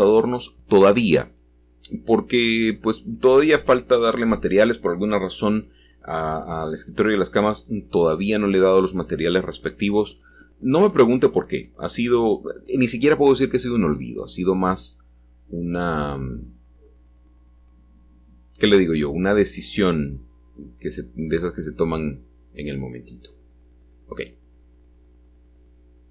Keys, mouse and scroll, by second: 0.0 click, 1.2 g, 6.9-7.9 shift+drag, 7.9 middle click, 10.4-13.1 scroll up 1, 13.1-14.4 scroll up 1, 17.7 middle click, 18.4 shift+middle click, 19.7 shift+middle click, 21.6 middle click, 21.8 middle click, 23.7-24.9 shift+middle drag.